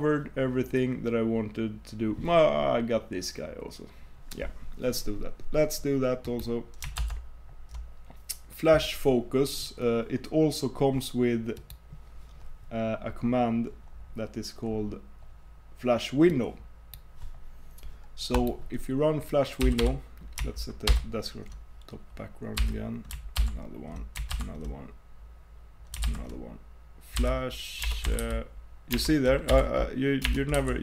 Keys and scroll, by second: 7.0 super+Tab, 20.9 super+w.